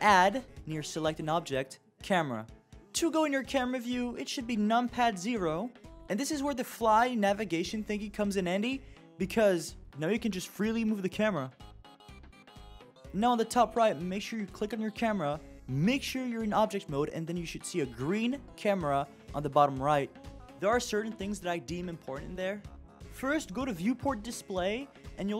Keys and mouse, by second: 3.1 KP_0, 9.9 shift+f, 15.5 click, 16.2 click, 23.3 click.